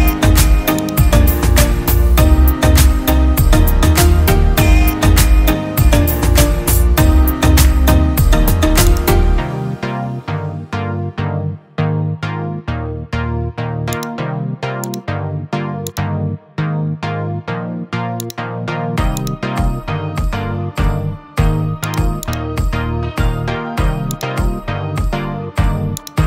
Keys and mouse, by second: 8.9-10.6 drag, 21.9-24.5 drag.